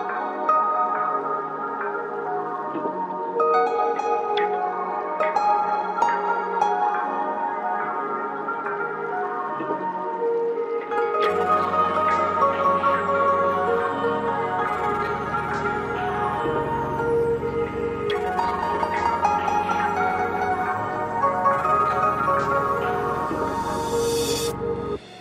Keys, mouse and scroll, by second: 0.2 scroll down 1, 0.3 scroll up 1, 0.4 click, 0.6 click, 0.9 g, 1.0 click, 2.6 right click, 2.9 ctrl+Page_Down, 3.3 click, 3.4 scroll up 1, 3.6 click, 3.8-4.3 scroll down 2, 3.9 click, 4.5 scroll up 1, 4.8 click, 4.9 scroll down 1, 5.1 click, 7.5 click, 8.2 scroll down 1, 8.3 click, 9.5 scroll up 1, 10.1 click, 10.4 click, 10.7 scroll down 1, 10.9 click, 11.1 right click, 11.3 click, 11.9 click, 12.8 click, 13.2 click, 13.4 right click, 13.6 click, 14.8 g, 14.8 click, 16.6 scroll up 1, 16.8 ctrl+shift+q, 16.8 click, 17.6 scroll down 2, 17.7 click, 17.9-18.4 scroll up 2, 17.9 ctrl+click, 18.2 click, 18.4 shift+click, 18.7 shift+right click, 18.8 click, 18.9 shift+click, 19.0 c, 19.1 click, 20.1 click, 20.5 ctrl+z, 20.8 ctrl+z, 20.9 click, 21.8 scroll up 1, 22.1 click, 22.3 scroll down 1, 22.4 scroll up 1, 22.5 ctrl+shift+click, 23.0 shift+click, 23.3 click, 23.8 click.